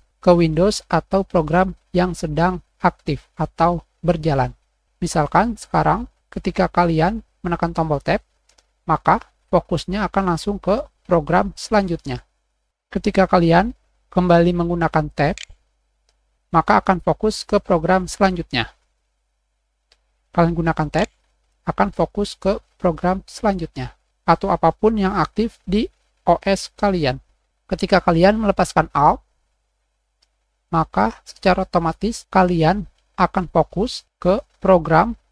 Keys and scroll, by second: 8.0 alt+Tab, 8.4 alt+Escape, 12.6 alt+Tab, 15.2 alt+Tab, 17.0 alt+`, 19.7 alt+1, 19.7 alt+`, 19.9 alt+Tab, 20.8 alt+Tab, 28.7 alt+7, 28.9 alt+space, 30.2 x.